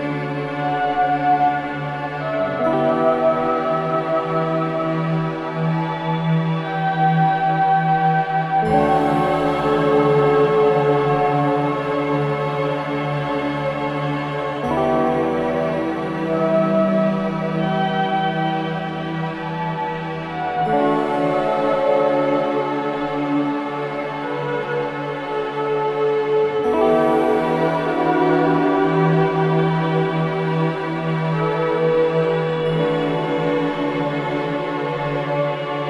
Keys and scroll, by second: 0.1 3, 7.0 4, 9.8 F3, 12.7 3, 23.3 4, 27.0 3, 31.6 ctrl+d, 31.7 Escape, 33.8 4.